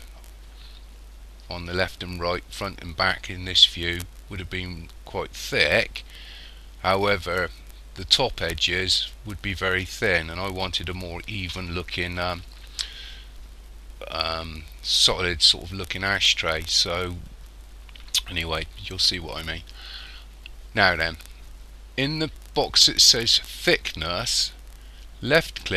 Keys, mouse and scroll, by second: 25.5 click.